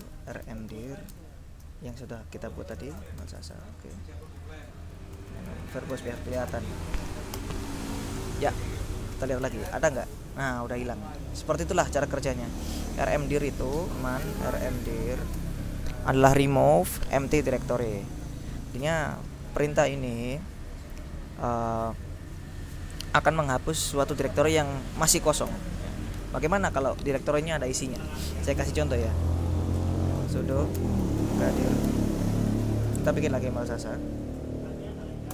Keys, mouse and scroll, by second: 0.0-4.0 typing, 4.5 ctrl+Left, 5.2 ctrl+-, 5.6 ctrl+v, 5.8 ctrl+r, 6.0 ctrl+b, 6.2 ctrl+o, 6.3 ctrl+s, 6.4 ctrl+e, 6.7 ctrl+space, 7.5 Return, 9.3-10.1 typing, 11.5 click, 12.5 click, 13.2 click, 13.7-15.6 typing, 17.9-19.4 drag, 19.6 click, 21.9-22.7 scroll down 2, 22.8-23.6 scroll up 2, 25.6 q, 30.0-33.9 typing.